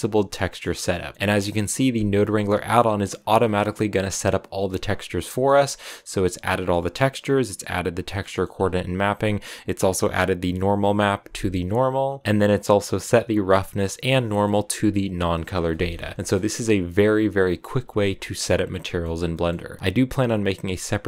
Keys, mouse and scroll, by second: 0.0-2.1 drag, 5.0-9.7 drag, 14.1-15.5 drag, 15.5 scroll down 3, 15.7 middle click, 15.8-16.3 scroll up 5, 15.9 shift+middle click, 17.6-18.7 shift+middle drag, 18.7 scroll down 4, 19.8-21.0 drag.